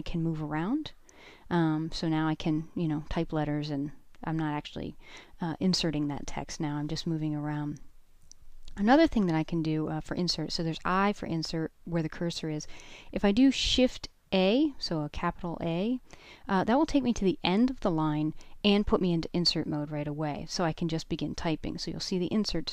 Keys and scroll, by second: 5.4 j, 14.8 shift+a.